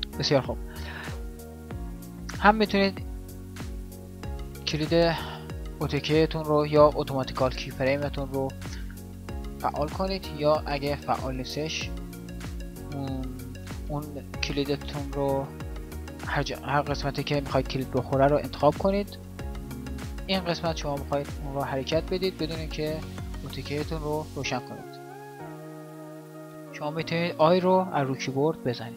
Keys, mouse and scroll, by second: 1.0-3.1 drag, 20.4 g, 27.5 i.